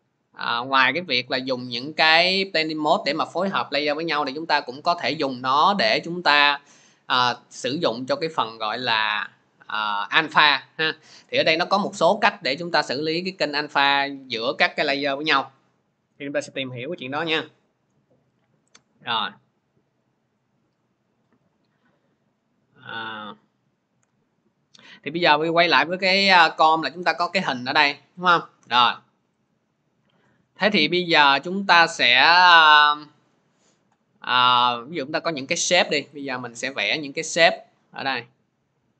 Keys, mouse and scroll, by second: 16.4 click, 18.3 click, 19.2 click, 20.0 click, 21.3 click, 23.8 Delete, 25.2 click, 26.6 middle click, 36.0 click, 36.8 click.